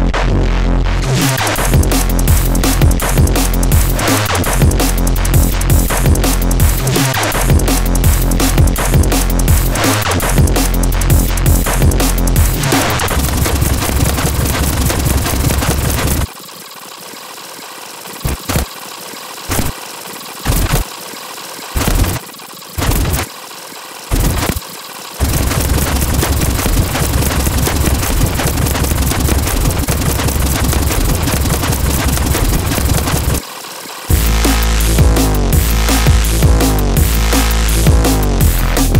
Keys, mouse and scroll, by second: 1.2 click, 2.0 scroll down 2, 6.4 click, 6.8 scroll up 2, 10.5-12.9 alt+drag, 13.3 alt+click, 13.9-14.3 scroll down 2, 15.1 right click, 15.5 ctrl+click, 16.1 scroll up 2, 16.2 space, 16.3 scroll down 2, 16.4 right click, 16.7 right click, 17.2 ctrl+g, 17.4 scroll up 1, 17.8 ctrl+8, 18.2-21.7 typing, 18.4 scroll up 1, 19.4-19.7 scroll up 2, 20.4-20.9 scroll up 2, 20.9 click, 21.1 click, 22.2 click, 22.3 scroll up 1, 22.4 click, 22.7 click, 22.7-25.2 typing, 23.3 click, 23.3 scroll up 1, 23.5 alt+click, 23.7 click, 24.0 click, 24.5 click, 24.7 alt+click, 25.4 click, 27.1 click, 27.7 click, 27.9 alt+click, 28.2 click, 28.4-28.9 scroll down 2, 29.4 click, 29.6 click, 29.9 ctrl+click, 30.3 click, 30.4 scroll up 2, 30.5 click, 30.8-31.3 scroll down 2, 31.3 right click, 31.6 right click, 31.8 g, 31.8 scroll down 2, 32.0 ctrl+click, 32.3 click, 32.7-33.3 scroll down 2, 33.3 space, 33.5 click, 34.0 click, 34.1 space.